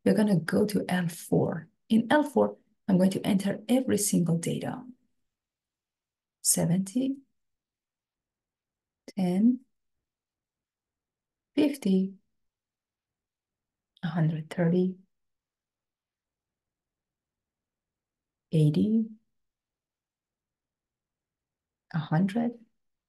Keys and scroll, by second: 5.7 7, 6.7 0, 7.6 Return, 8.6 1, 9.5 0, 10.4 Return, 11.7 5, 12.6 0, 13.6 Return, 14.7 1, 15.6 3, 16.6 0, 17.8 Return, 19.2 8, 20.2 0, 21.2 Return, 22.4 1.